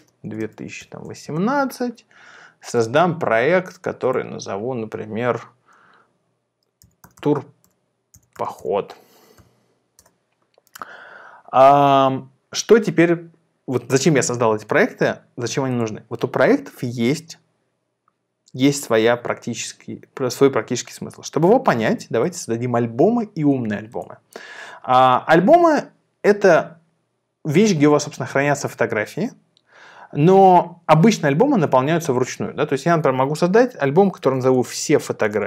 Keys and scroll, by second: 0.0-1.2 typing, 6.6-9.4 typing, 9.9 Return, 33.9-35.4 typing.